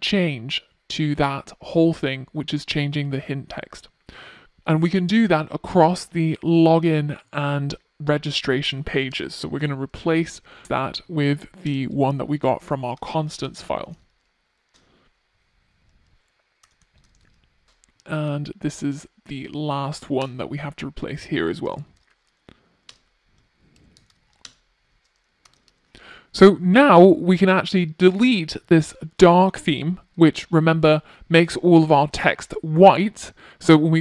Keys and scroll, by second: 3.8 super+c, 9.5 Return, 11.8 Return, 14.0 super+v, 18.9 Return, 23.6 ctrl+r.